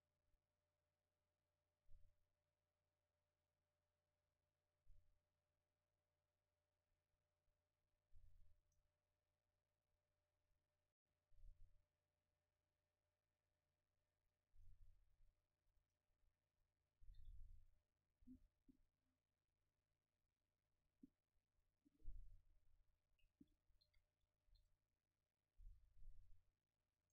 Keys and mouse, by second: 5.0-6.9 middle drag, 8.1 middle click, 8.7-10.5 right drag, 10.2-12.2 drag, 15.6 a, 17.1 ctrl+s, 18.2-20.3 drag, 23.9 a, 24.4 a, 24.5 ctrl+s, 26.5 middle click.